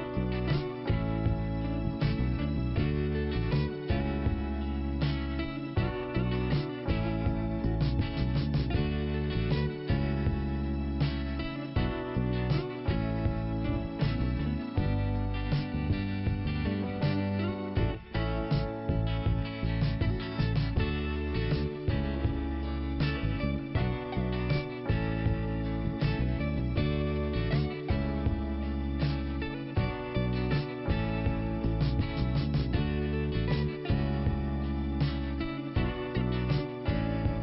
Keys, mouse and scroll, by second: 1.6 click, 3.1 click, 3.1 click, 3.7 click, 7.3 click, 15.7 click, 17.4 click, 17.5 click, 17.6 click, 17.7 click, 18.1 click, 18.3 click, 18.4 double click, 18.5 double click, 18.6 double click, 18.7 double click, 18.8 double click, 18.9 double click, 18.9 double click, 19.0 double click, 19.1 double click, 19.4 double click, 19.5 double click, 19.8 double click, 19.9 double click, 20.0 double click, 20.2 double click, 20.3 double click, 20.4 double click, 22.4 middle click, 24.2 click, 24.8 click, 24.9 click, 26.0 f, 27.5 click, 28.9 click, 30.7 click, 32.5 scroll down 2, 33.3-33.8 scroll up 1, 33.8 click, 33.9 click, 34.2 click, 34.3 double click, 34.8 double click, 36.4 click.